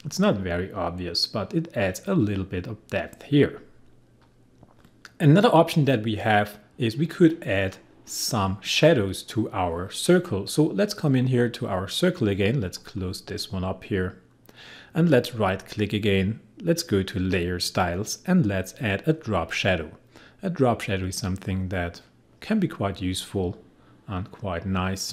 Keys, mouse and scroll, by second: 4.6 click, 4.7 click, 12.0 click, 15.8 right click, 22.3 click.